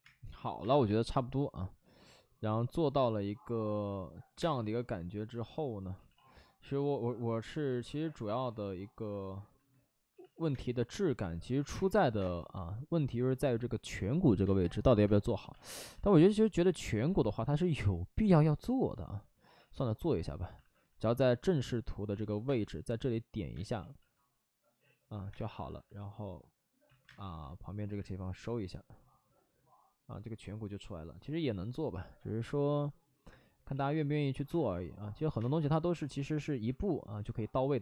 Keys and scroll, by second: 0.6 space, 4.3 1, 4.3 space, 5.9 ctrl+z, 6.1 ctrl+z, 7.6 ctrl+z, 10.1 ctrl+z, 10.3 ctrl+z, 10.4 space, 11.5 ctrl+z, 11.7 space, 12.1 space, 13.9 space, 14.4 space, 15.9 alt+s, 16.1 space, 17.0 ctrl+z, 18.1 ctrl+z, 18.9 ctrl+z, 19.5 ctrl+z, 20.5 alt+s, 20.8 ctrl+z, 22.0 ctrl+z, 22.4 space, 23.5 space, 23.7 ctrl+z, 25.2 space, 26.8 ctrl+z, 27.0 space, 29.6 space, 33.6 ctrl+z, 34.4 space, 35.2 ctrl+z, 35.3 space, 36.6 ctrl+z.